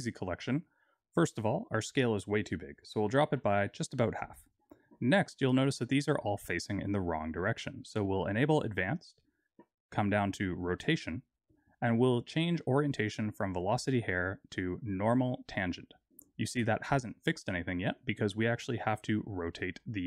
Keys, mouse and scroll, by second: 1.6 click, 5.5-8.3 scroll up 4, 8.3 click, 10.5 click, 11.3 click, 13.5 click, 15.9-16.7 scroll down 2, 16.7-17.9 scroll down 2, 17.9 click, 18.7-19.1 scroll down 2, 19.2 middle click.